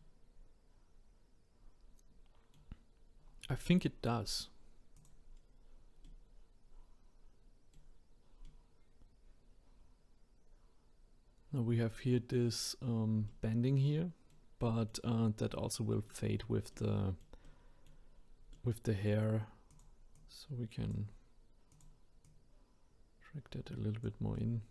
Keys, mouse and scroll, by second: 3.1-3.5 scroll down 4, 3.5-4.9 middle drag, 4.9 click, 5.3 scroll up 1, 6.1-8.0 middle drag, 8.0-8.4 scroll down 2, 8.4-18.0 middle drag, 18.0-18.5 scroll up 1, 18.5-19.7 middle drag, 19.7 click, 21.7 click, 22.3 click, 24.3-24.7 middle drag.